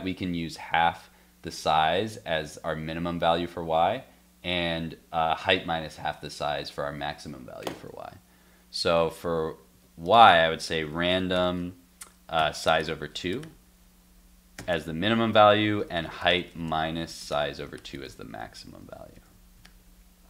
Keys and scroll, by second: 7.8 super+Tab, 9.7 alt+Tab, 18.1 super+s, 18.8 super+s, 19.2 super+Tab, 19.6 super+r.